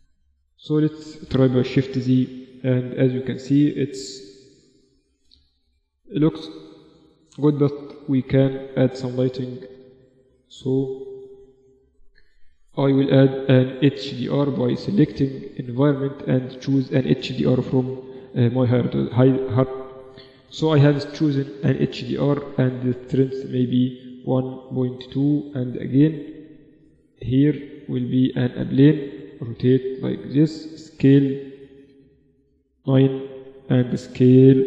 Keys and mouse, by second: 0.4 shift+z, 6.0 z, 7.4 KP_0, 7.6 KP_1, 10.2-11.2 middle drag, 11.2 click, 12.2-16.1 drag, 19.4 click, 21.7-23.9 drag, 23.9-25.4 middle drag, 25.4 KP_3, 26.7 shift+a, 29.2 r, 30.6 s, 33.4 s, 34.5 g.